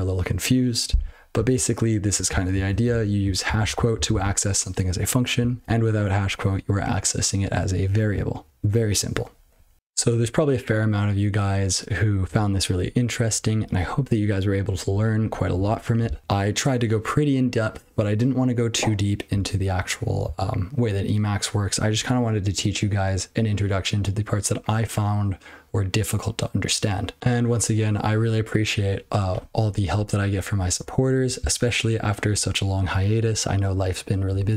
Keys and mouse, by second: 2.3 ctrl+n, 2.5 ctrl+n, 2.7 ctrl+p, 2.9-3.2 ctrl+f, 3.4 ctrl+f, 3.6 ctrl+f, 3.9 ctrl+f, 4.1 ctrl+f, 5.6 BackSpace.